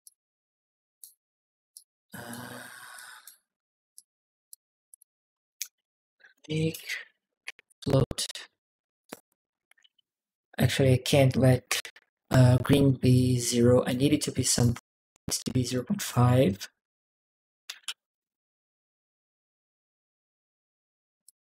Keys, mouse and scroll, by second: 1.5 click, 2.7 click, 3.7 click, 4.7 click, 5.3 right click, 5.8-7.4 typing, 8.8 right click, 9.3-10.3 typing, 11.3 Down, 11.5 Return, 12.9 click, 14.3 1, 14.3 click, 14.3 1, 15.4 click, 15.8 click, 21.0-21.4 drag.